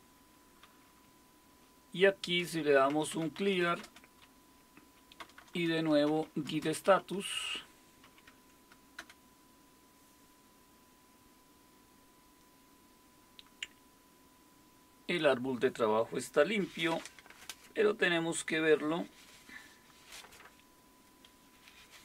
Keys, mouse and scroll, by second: 2.4-4.1 typing, 5.2 Return, 5.4 Return, 5.5 Return, 5.8-9.0 typing.